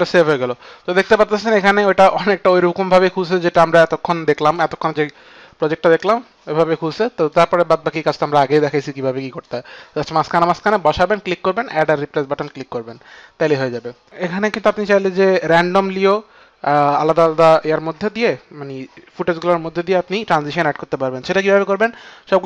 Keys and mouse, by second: 0.6 Return, 0.6 KP_2, 1.6 click, 2.1 click, 7.2 click, 14.1 click, 17.6 click, 21.5 click.